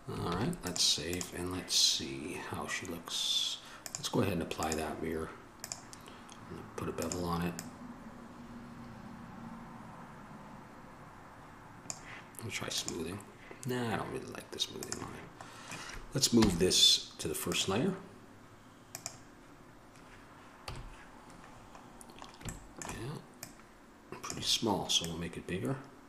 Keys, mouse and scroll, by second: 0.5 ctrl+s, 15.7 click, 16.6 m, 20.8 KP_1, 24.2 middle click.